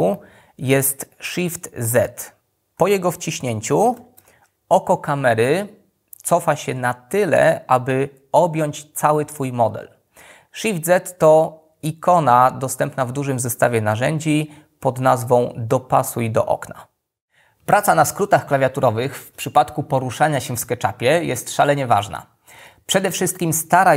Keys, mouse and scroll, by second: 1.9 shift+z.